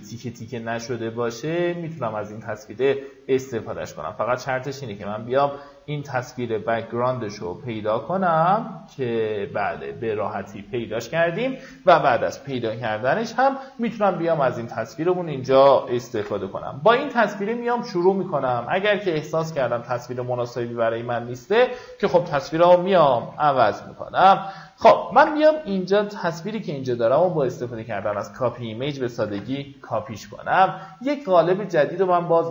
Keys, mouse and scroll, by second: 7.2 middle click, 9.4 right click, 10.6 click, 13.8 Tab, 14.9 click, 15.9 ctrl+n, 23.0 ctrl+v, 24.6 Tab, 25.3 right click, 27.2 click, 27.8 Tab, 29.0 ctrl+n.